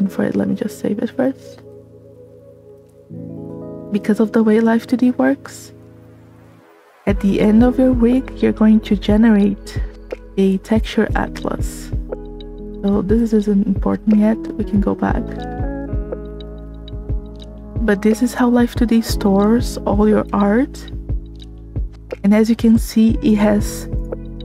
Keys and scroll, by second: 2.8 s, 2.9 space.